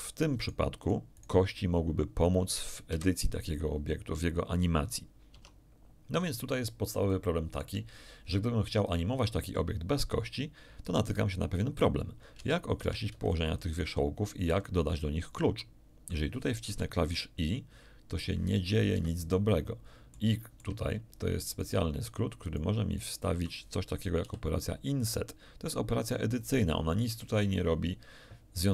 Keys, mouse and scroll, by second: 0.0 middle click, 0.4 middle click, 0.8 right click, 2.8 KP_1, 5.3 Tab, 6.6 scroll down 1, 7.0 shift+middle click, 12.3 Tab, 12.8 a, 13.1 b, 13.2 click, 16.6 i, 18.9 Escape, 19.3-20.8 middle drag, 20.8-21.1 shift+scroll up 1, 21.4 shift+right click, 22.0 shift+right click, 22.9 shift+right click, 24.2 i, 26.4 click, 28.4 scroll down 1.